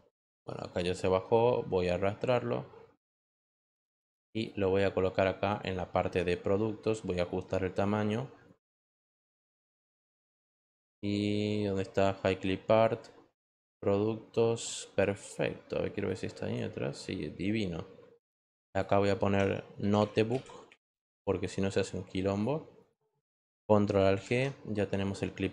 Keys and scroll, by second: 19.5-21.5 typing.